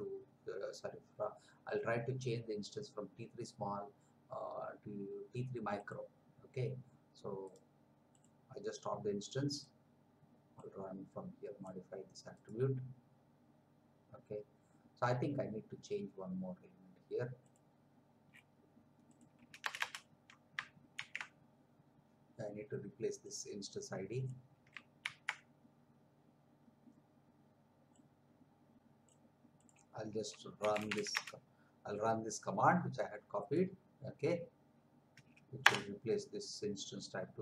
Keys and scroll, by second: 19.6 Return, 20.9 ctrl+v, 25.0 ctrl+c, 30.3-31.4 typing, 35.6 Return.